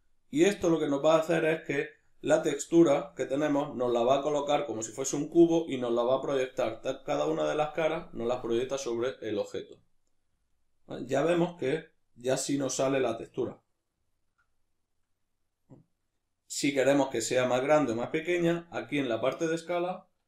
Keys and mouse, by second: 2.1-17.9 ctrl+middle drag, 17.9-20.2 shift+drag.